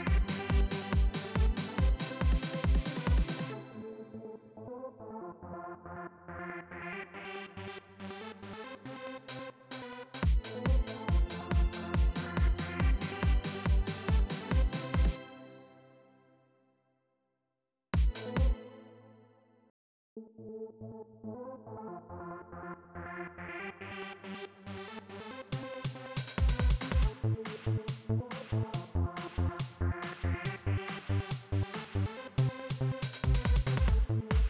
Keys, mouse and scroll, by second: 2.0-6.0 drag, 8.1-9.1 drag, 12.8-14.8 drag, 14.9 space, 15.8-17.1 drag, 17.7 space, 19.4 click, 19.9 space, 21.3-26.0 drag, 26.4-27.8 drag, 29.5 click.